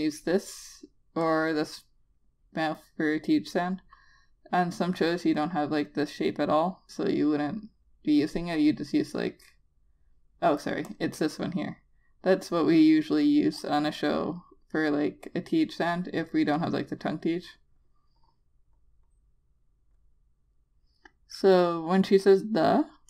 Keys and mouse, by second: 11.3 click, 17.0 click.